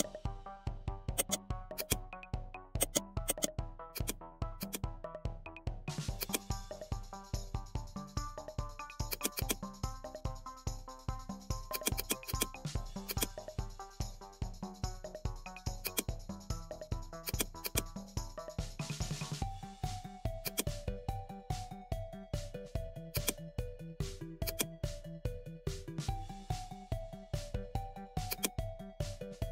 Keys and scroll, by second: 2.4 ctrl+z.